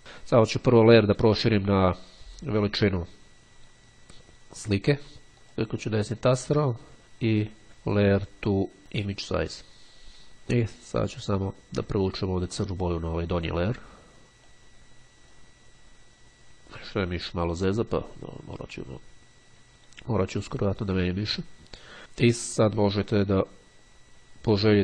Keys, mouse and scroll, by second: 0.1 click, 5.1 click, 9.2-10.2 drag, 13.1 click, 14.7-15.9 drag.